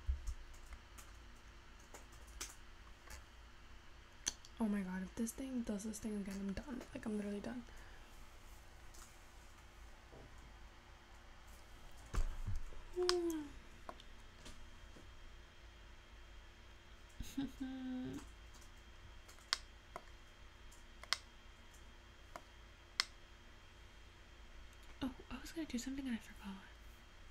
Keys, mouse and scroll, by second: 19.6 middle click, 21.7-26.6 middle drag.